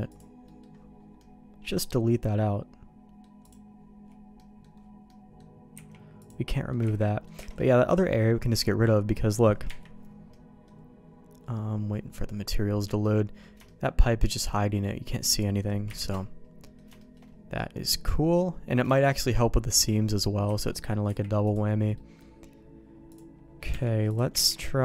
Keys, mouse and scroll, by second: 0.4 middle click, 1.2 middle click, 2.3 middle click, 3.4 click, 4.3 middle click, 5.0 middle click, 5.7 x, 6.5 middle click, 6.8 ctrl+z, 7.0 middle click, 7.4 alt+a, 7.6 middle click, 9.7 KP_Divide, 12.2 middle click, 13.0 middle click, 13.6 shift+middle click, 14.4 middle click, 15.0 middle click, 15.8 KP_Divide, 16.6 middle click, 17.0 middle click, 18.9 shift+middle click, 20.4 a, 21.0 u, 22.0 middle click, 23.1 click, 23.7 Tab, 24.1 click, 24.6 ctrl+e.